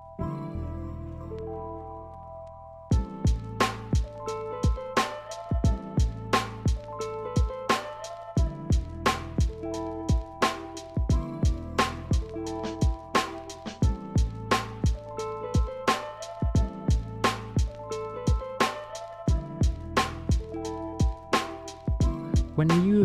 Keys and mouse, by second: 1.1-2.3 shift+drag, 2.8 alt+z, 5.4 shift+click, 6.1 alt+z, 7.3 KP_Divide, 10.7 click, 12.8 click, 15.5 alt+z, 16.6-17.8 drag, 18.7 alt+z, 21.3-22.0 drag, 22.9 click.